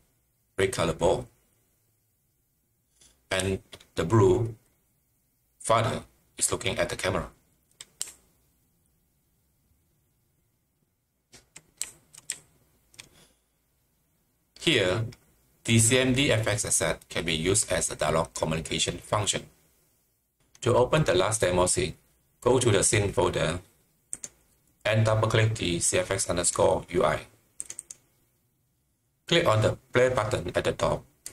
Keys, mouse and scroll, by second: 3.3-7.3 typing, 8.5-10.9 typing, 12.7 typing, 18.0 typing, 19.7-20.5 typing, 24.1 click, 26.4 click, 27.7 double click, 31.2-31.3 drag.